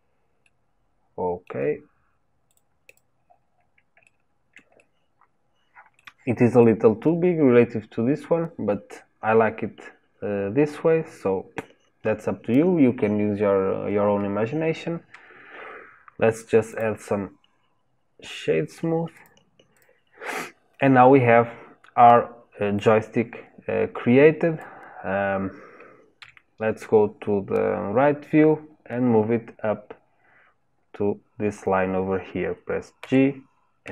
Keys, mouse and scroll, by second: 0.4-2.5 middle drag, 2.5 click, 2.8 click, 3.2-3.6 scroll down 4, 4.0-6.5 shift+middle drag, 6.5 click, 11.6-13.6 scroll up 1, 16.7-21.6 drag, 21.6-22.8 scroll down 2, 22.8 click, 26.2 KP_3, 33.0 g.